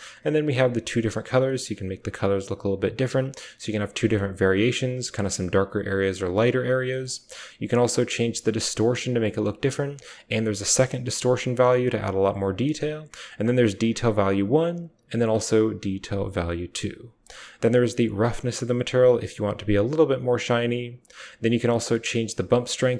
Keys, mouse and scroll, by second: 6.7 click, 7.2-9.2 drag, 9.7-12.2 drag, 12.7-14.2 drag, 14.7-16.5 drag, 17.4-20.2 drag, 20.8-22.9 drag.